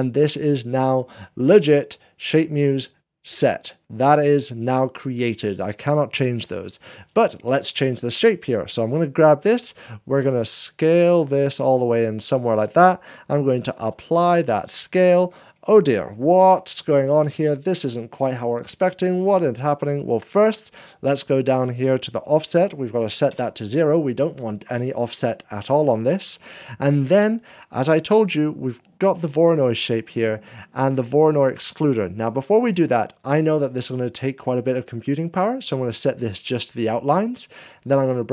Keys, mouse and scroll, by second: 1.0 middle click, 1.3-15.5 drag, 9.6 s, 12.0 s, 13.6 ctrl+a, 14.2 s, 16.4 ., 17.3 ctrl+a, 17.3 middle click, 19.7 scroll down 1, 22.2 click, 22.2 ., 23.0 0, 23.3 Return, 23.3-25.3 scroll down 1, 25.3-26.1 scroll down 1, 26.1-38.3 drag, 27.0 scroll down 2.